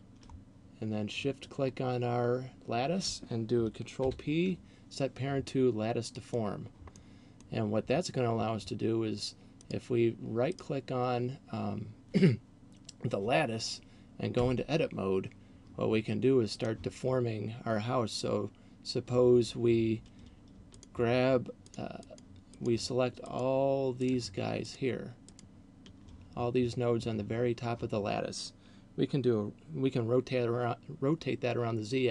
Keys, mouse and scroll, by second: 4.1 ctrl+p, 7.1 middle click, 9.6 right click, 10.6 right click, 14.3 Tab, 16.6 right click, 20.8 shift+right click, 21.8 shift+right click, 22.1 shift+right click, 23.3 shift+right click, 24.1 shift+right click, 24.8 shift+right click, 25.6 shift+right click.